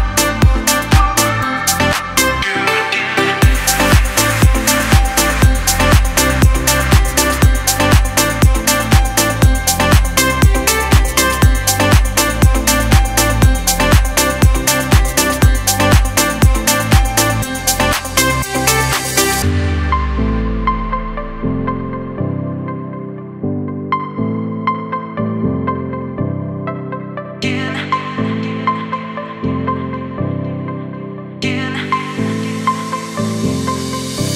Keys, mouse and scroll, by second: 1.8 typing, 6.0-17.9 drag, 6.3 typing, 17.9-22.6 shift+drag, 22.6-26.9 shift+drag, 30.2 typing, 30.3 click, 33.7 alt+right click.